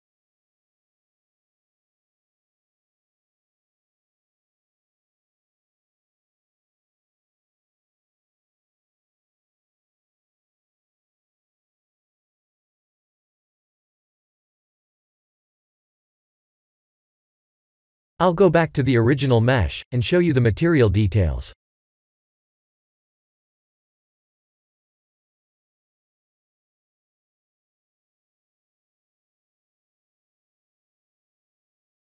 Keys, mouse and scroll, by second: 2.0-4.0 drag, 6.1 click, 6.8-9.0 drag, 10.3 click, 10.8-11.9 drag, 13.2-15.0 middle drag, 15.3 KP_0, 22.0 click, 22.7 click, 23.3 click, 23.8 x, 25.6 click, 27.2 x, 30.6 click.